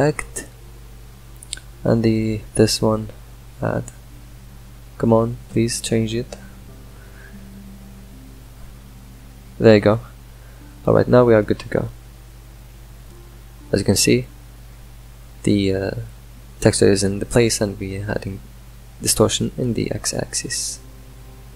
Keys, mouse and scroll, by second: 0.5 scroll up 4, 1.5-3.5 drag, 4.9 middle click, 5.3-10.9 drag, 10.9-12.7 middle drag, 12.7-17.3 drag, 17.3-21.1 middle drag, 21.1-21.5 shift+drag.